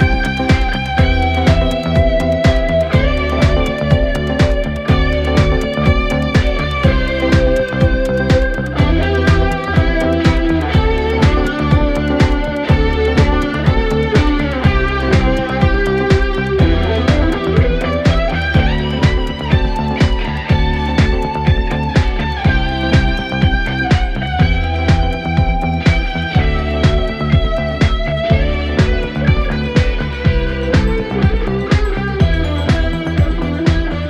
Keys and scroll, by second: 5.3 ], 5.8 ], 6.7 4, 8.3 3, 8.7 ], 19.8 ], 27.1 4, 32.6 3, 33.9 Delete.